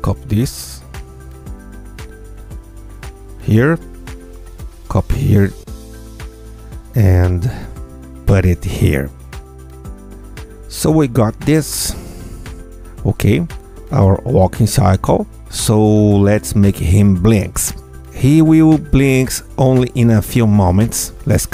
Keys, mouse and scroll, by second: 1.8-3.4 alt+drag, 4.3-6.3 ctrl+drag, 7.3-8.9 alt+drag, 9.6 F2, 9.8-10.9 drag, 10.7 Tab, 11.0 space, 17.3 space, 18.5-21.5 drag.